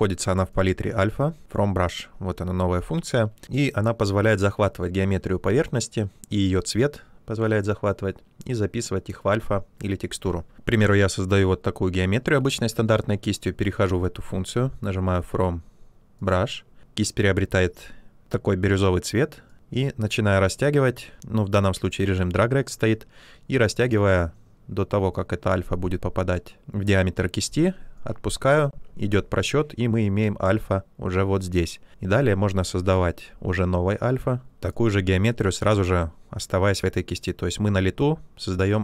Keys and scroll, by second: 25.0 space.